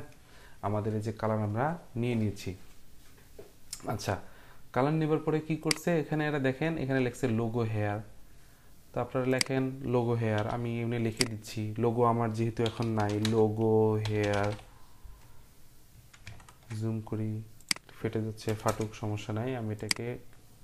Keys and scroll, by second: 10.3 t, 12.4-14.9 typing, 18.4 BackSpace, 18.6 Return.